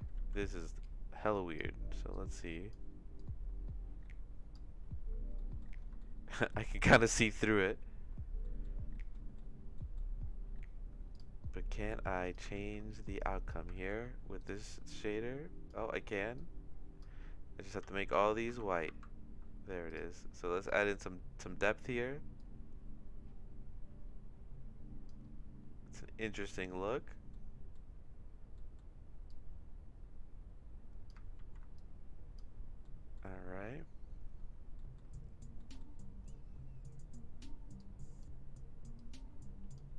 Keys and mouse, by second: 0.1 ctrl+z, 0.9 click, 2.1 click, 3.2-4.5 drag, 5.3 middle click, 5.9 shift+middle click, 8.6 middle click, 9.2 middle click, 9.9 click, 13.8 ctrl+z, 17.9 ctrl+c, 18.1 ctrl+v, 18.5 ctrl+v, 18.9 ctrl+v, 26.8 middle click, 27.4 middle click, 28.5 middle click, 29.3-31.1 drag, 31.4 ctrl+z, 31.7 click, 33.1 middle click, 34.9 middle click, 35.7 middle click, 37.7 click, 39.0 click.